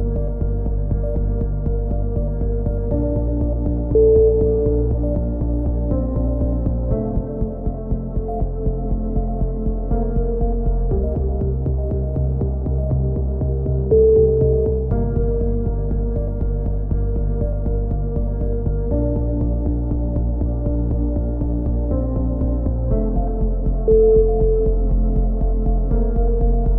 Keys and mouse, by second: 0.5 z, 0.9 c, 1.2 right click, 1.5 click, 2.3 a, 2.5 click, 2.5 z, 3.5-5.9 drag, 5.8 right click, 6.2 KP_1, 6.4 z, 6.9 e, 7.3 click, 8.4 click, 9.5 right click, 9.8 click, 10.5 right click, 10.9 e, 11.3 click, 11.8 click, 12.7-14.0 drag, 13.7 z, 14.0 middle click, 14.0 z, 14.2 z, 14.4 click, 14.8 right click, 15.3 click, 16.1 ctrl+z, 16.4 KP_1, 16.9 click, 19.7 right click, 20.2 click, 21.3 c, 21.6 right click, 21.7 KP_3, 22.6 click, 22.7 right click, 23.2 KP_3, 23.5 click, 24.7 c, 25.3 right click, 25.7 ctrl+z, 26.0 c, 26.4 right click, 26.6 click.